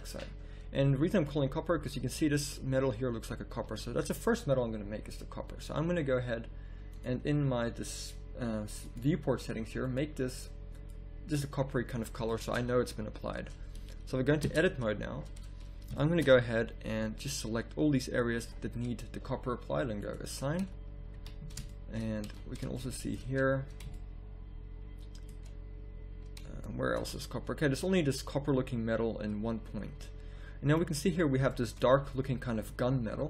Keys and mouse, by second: 1.8 z, 3.7 z, 6.9-11.3 drag, 12.6 z, 14.5 Tab, 16.8 b, 17.8-20.0 drag, 20.6 z, 20.9 click, 21.1 a, 22.3 z, 30.6 middle click, 31.8-33.2 middle drag.